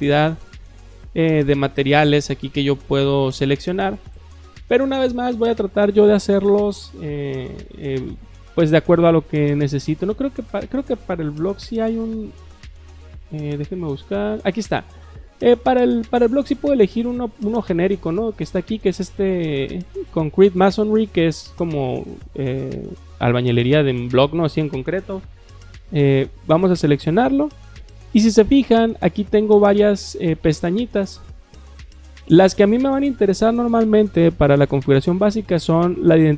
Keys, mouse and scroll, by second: 0.7-1.1 scroll down 2, 1.1-2.8 scroll up 2, 10.2 click, 10.6 click, 11.4-12.7 typing, 26.1 click, 35.6 click.